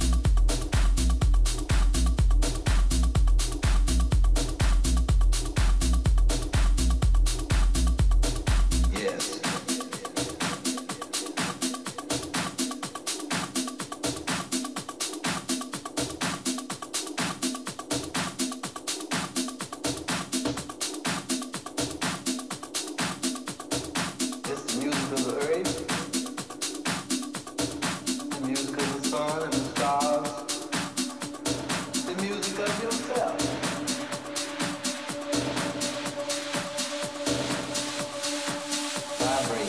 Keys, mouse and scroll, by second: 0.0 a, 0.2 a, 0.7 click, 0.7 right click, 1.1-2.4 middle drag, 2.9 click, 2.9-6.4 middle drag, 4.5 click, 6.1 KP_3, 6.7 z, 7.1 middle click, 10.7 ctrl+b, 15.1 Tab, 15.5 a, 15.8 a, 16.5 a, 17.0-19.5 right drag, 18.8-19.9 middle drag, 20.1 ctrl+a, 23.0 Tab, 26.1 ctrl+b, 33.4-35.6 middle drag, 34.5 z, 35.2 a, 36.1-39.6 middle drag.